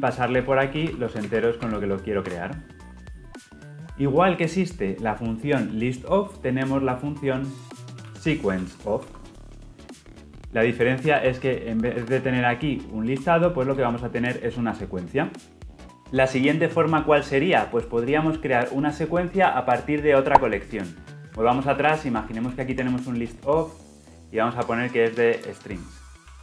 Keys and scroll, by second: 3.5 Return, 9.0 Return, 10.0 Return, 13.7 alt+Return, 15.3 Return, 21.4 ctrl+z, 22.3 ctrl+z.